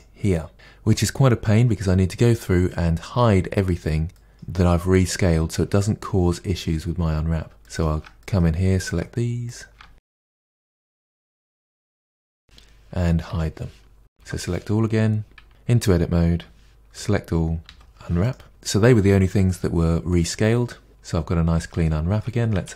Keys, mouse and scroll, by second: 4.1-7.8 middle drag, 7.8 shift+click, 8.2-8.9 middle drag, 8.9 shift+click, 9.5 shift+click, 10.0 scroll down 6, 10.2 middle drag, 10.5 shift+click, 10.6 shift+click, 10.7 middle click, 10.8 shift+click, 11.0 shift+click, 11.1 scroll down 1, 11.3 shift+middle click, 11.6-12.0 scroll up 11, 12.0 shift+click, 12.1 shift+click, 12.4 shift+click, 13.2 h, 14.2 a, 15.5 Tab, 16.9 a, 18.3 u, 18.5-22.7 middle drag.